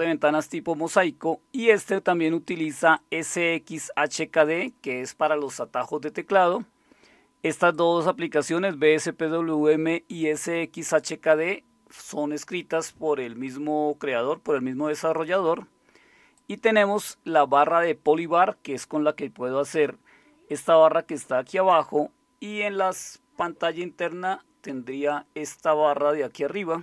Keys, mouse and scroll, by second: 18.6-20.1 drag.